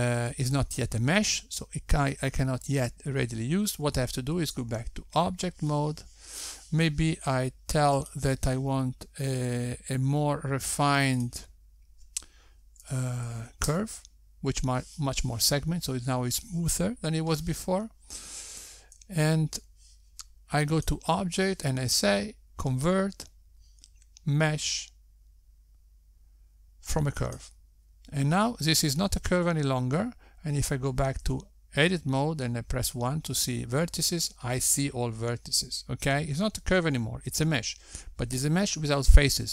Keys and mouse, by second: 6.7 Tab, 10.2 click, 13.7 click, 23.2 click, 33.6 Tab, 35.3 1.